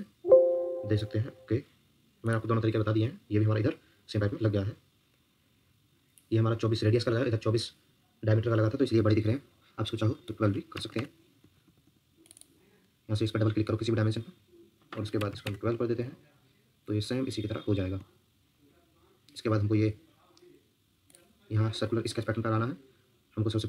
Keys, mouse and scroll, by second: 10.5-11.3 typing, 11.6 Escape, 12.3 double click, 14.9-15.8 typing, 18.0 Escape.